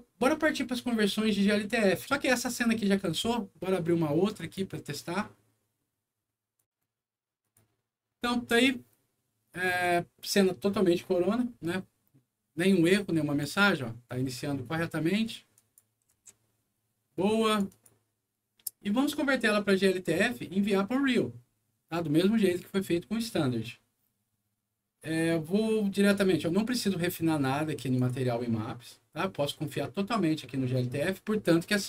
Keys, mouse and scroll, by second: 4.3 click, 6.5 click, 7.3 click, 9.6 click, 12.8 click, 15.5 click, 16.0 c, 17.4 click, 17.6 click, 22.5 click, 27.9 click.